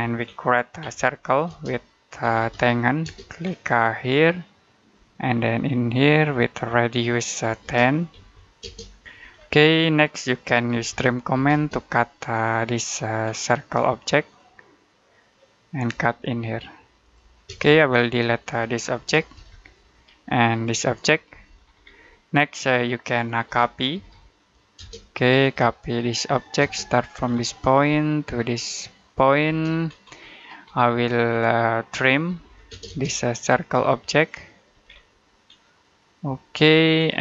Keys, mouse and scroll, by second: 0.1-0.7 scroll up 1, 0.7-2.9 typing, 3.3-4.7 scroll up 1, 4.7 click, 7.5-8.5 typing, 9.2-9.7 scroll down 1, 9.7 middle click, 10.3-11.2 typing, 12.3 click, 13.1-14.1 scroll up 1, 14.1 click, 17.3 space, 17.8 click, 19.2 Delete, 19.3 scroll down 1, 19.6 middle click, 20.4 click, 21.2 Delete, 21.5-22.0 scroll down 1, 22.0 middle click, 23.3-24.6 typing, 25.3 click, 26.4 space, 26.8 click, 27.1 scroll down 1, 27.4 middle click, 28.9 click, 29.3 space, 29.7-30.6 scroll up 1, 30.6 middle click, 31.1-32.1 scroll up 1, 31.9-32.8 typing, 33.2 click, 34.7 scroll down 1, 34.9 middle click, 35.3-36.4 scroll up 1, 36.4 click.